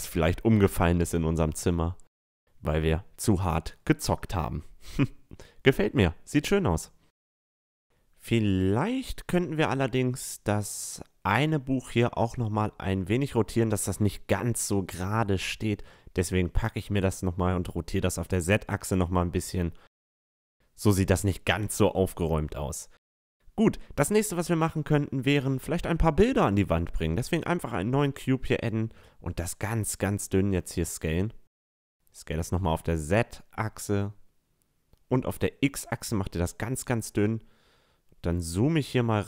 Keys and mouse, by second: 2.7-4.5 drag, 4.5 a, 4.7-7.8 middle drag, 8.5-11.4 middle drag, 11.9-16.1 middle drag, 16.1-18.0 right drag, 16.5 r, 19.5-21.2 drag, 20.5 a, 21.2 middle click, 21.6 middle drag, 22.0 middle click, 22.6-26.0 middle drag, 25.6-27.3 drag, 26.7 s, 30.4-32.1 drag, 31.5 s, 33.7 s, 36.2-36.9 middle drag, 37.0-39.2 middle drag.